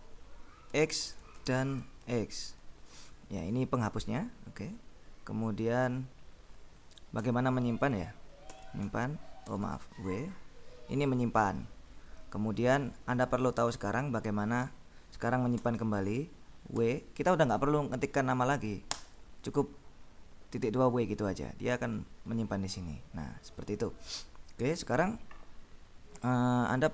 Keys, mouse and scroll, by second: 0.6-1.9 typing, 7.3 Return, 8.6 shift+;, 9.0 shift+q, 9.7 w, 14.0 click, 14.2 Escape, 15.6 shift+;, 16.8 w, 19.1 Return.